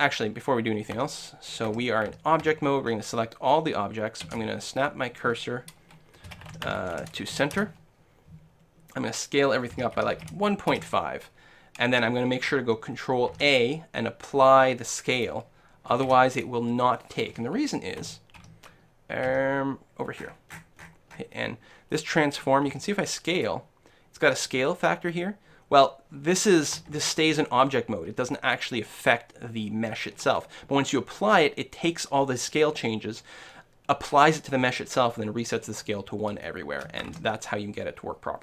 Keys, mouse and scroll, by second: 1.0 Tab, 1.5-4.9 middle drag, 1.7 Tab, 2.1 a, 2.5 a, 2.9-3.5 scroll up 1, 4.3 space, 9.7 s, 13.4 ctrl+a, 16.1 ctrl+s, 18.0 t, 18.4 t, 19.5 n, 20.2-23.2 middle drag, 22.9 s, 23.5-25.3 drag, 27.0 ctrl+z, 36.5-38.4 middle drag.